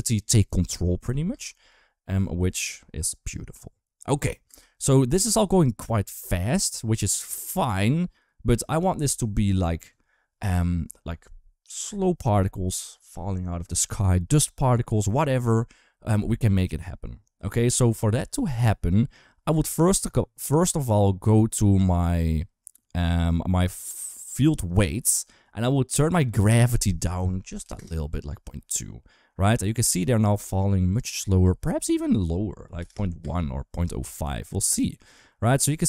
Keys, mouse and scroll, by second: 1.1 space, 1.6 shift+middle click, 4.3 space, 7.2 click, 24.4 click, 26.1-27.6 drag, 28.1 space, 31.3 space, 31.6-32.7 drag, 33.0 space.